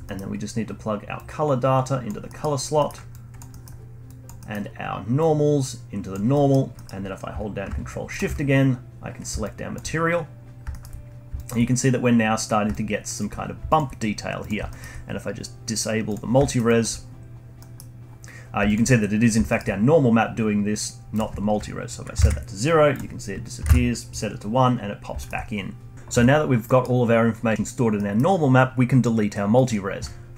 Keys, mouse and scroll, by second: 0.0 middle click, 0.2-1.1 scroll up 1, 1.1 drag, 2.2-2.6 middle drag, 2.6 scroll down 1, 2.7-3.1 middle drag, 3.1 click, 3.4 middle click, 4.0 click, 4.4 middle click, 4.6-5.1 scroll up 1, 5.1 click, 6.3-8.1 middle drag, 8.1 ctrl+shift+click, 9.4-10.1 alt+drag, 10.1-10.7 scroll up 1, 10.7-11.1 alt+middle drag, 11.1 scroll down 1, 11.3 alt+click, 11.6-12.4 scroll up 2, 12.4 scroll down 1, 12.7-13.4 alt+drag, 13.4 scroll down 1, 13.6 alt+click, 14.6-16.1 alt+middle drag, 16.1 click, 16.4 alt+middle click, 16.6 alt+click, 17.5-18.6 middle drag, 18.6 alt+click, 19.4-21.1 alt+middle drag, 21.1-24.9 drag, 24.9 scroll down 1, 25.1 alt+middle click, 26.6-27.2 middle drag, 27.2-28.0 scroll down 1, 28.0-30.3 middle drag.